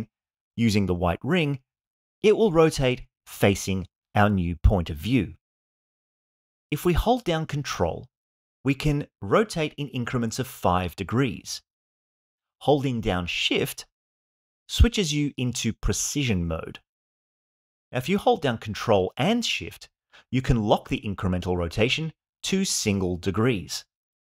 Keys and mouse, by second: 8.6-24.2 ctrl+drag.